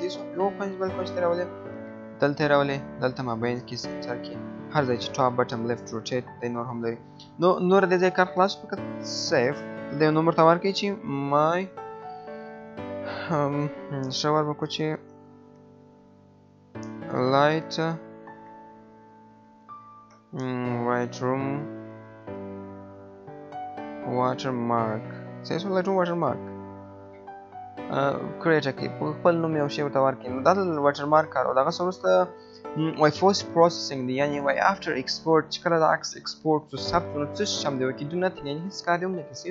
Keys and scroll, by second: 12.2 BackSpace, 23.0 BackSpace.